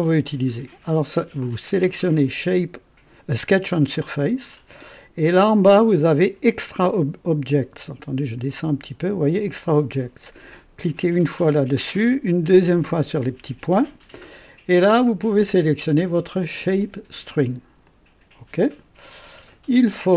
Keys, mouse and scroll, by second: 7.1-8.3 middle drag, 8.3-9.4 drag, 10.8 click, 12.9 click, 15.6 click, 17.8 click.